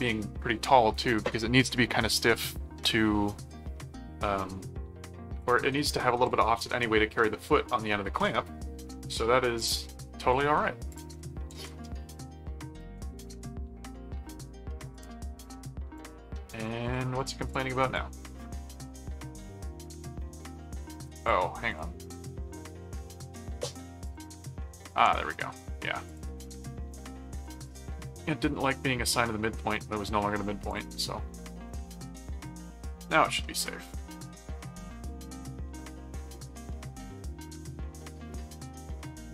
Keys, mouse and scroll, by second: 10.9 click, 11.1 middle click, 11.6 ctrl+s, 12.5 middle click, 13.0 ctrl+Tab, 14.9 click, 15.5 middle click, 16.0 click, 16.9-18.4 drag, 18.9 ctrl+click, 19.1 ctrl+Tab, 20.7-22.3 drag, 22.5 ctrl+4, 23.1 click, 24.0 click, 24.8 click, 26.0 click, 27.3 alt+v, 27.6 alt+click, 30.7 click, 32.0 click, 32.4 middle click, 33.4-39.3 middle drag.